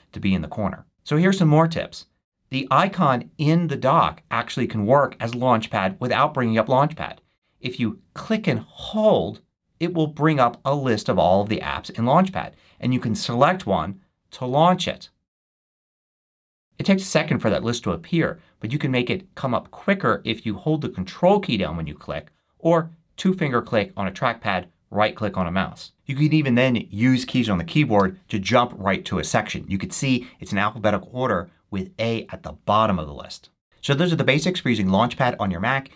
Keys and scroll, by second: 27.9 c.